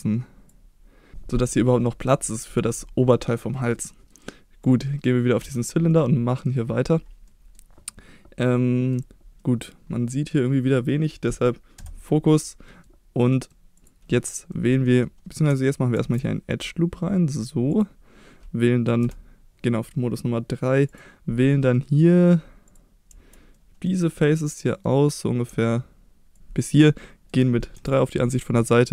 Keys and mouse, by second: 3.9 middle drag, 4.6 click, 5.4 Tab, 5.9-6.5 middle drag, 7.3 middle drag, 7.9-8.9 middle drag, 9.4 middle click, 10.1 middle click, 10.9 middle click, 11.8 KP_Divide, 12.7 middle click, 13.2 middle click, 14.5 middle click, 16.0 ctrl+r, 17.7 click, 19.0 3, 21.7 middle click, 23.5 middle click, 24.1 middle click, 26.3 ctrl+click, 27.0 middle click, 27.8 KP_3.